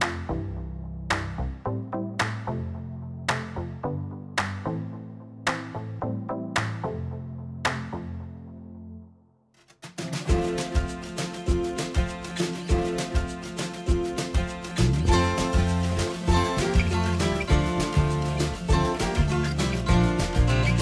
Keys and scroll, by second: 0.8 l, 10.1 g, 14.1 ctrl+a, 16.9-19.3 typing, 19.7 Return.